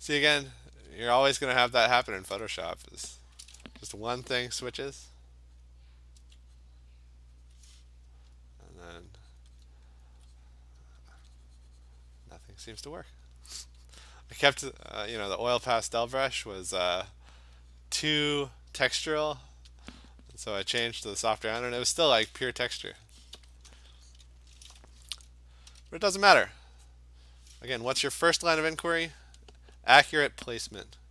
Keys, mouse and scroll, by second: 0.4 alt+click, 2.0 alt+click, 3.2 alt+click, 4.3 [, 4.5 [, 4.7 [, 4.9 [, 5.6 click, 6.2 [, 6.6 click, 7.5 click, 8.2 alt+click, 8.7 alt+click, 8.8 alt+click, 9.1 click, 9.4 click, 9.6 click, 9.9 alt+click, 10.0 alt+click, 10.4 click, 11.1 alt+click, 12.5 click, 15.8 click, 17.1 click, 19.0 click, 19.8 click, 20.9 click, 21.4-22.1 scroll, 21.4 click, 21.5 click, 23.9 click, 24.1 click, 25.7 ], 25.9 ], 26.1 ], 26.4 ], 26.9 click, 29.4 alt+click, 29.9 click, 30.5 click.